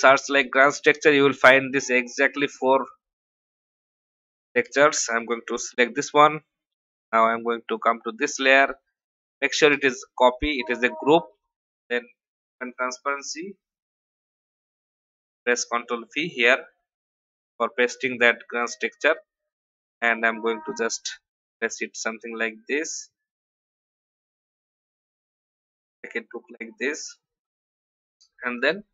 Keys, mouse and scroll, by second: 4.3 v, 5.6 ctrl+c, 6.7 click, 9.2 v, 15.0 ctrl+v, 19.7-27.0 drag.